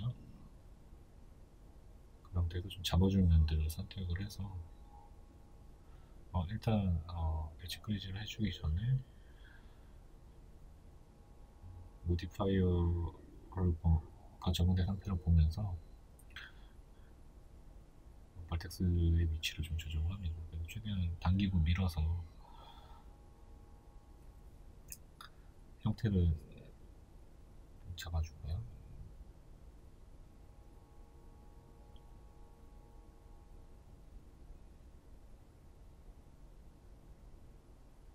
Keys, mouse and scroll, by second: 1.4 1, 2.2 right click, 3.7 b, 7.1 right click, 9.0 b, 12.1 click, 12.5 right click, 14.3 b, 16.9 right click, 18.5 b, 23.7 right click, 24.9 b, 25.9-27.7 middle drag, 26.6 ctrl+z, 27.7 right click, 28.1 ctrl+z, 30.9 KP_1, 33.1 z, 33.6-35.0 right drag, 35.0 b, 37.0 right click, 37.5 ctrl+z.